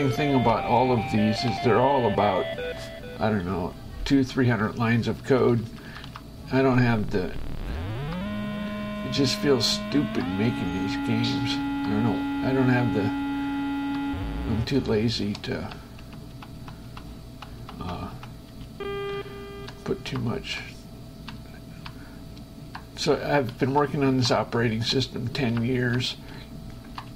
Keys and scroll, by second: 1.1 space, 1.3 Left, 2.8 shift+Escape, 4.7 Down, 6.8 space, 7.4 Up, 8.3 Left, 9.9 Up, 10.4 Left, 15.3 shift+Escape, 15.6 shift+Left, 16.2 Right, 18.7 space, 19.4 Left, 19.9 Up, 20.4 Left, 22.7 Up, 24.7 Right, 25.1 Up, 25.9 Left, 26.6 Up.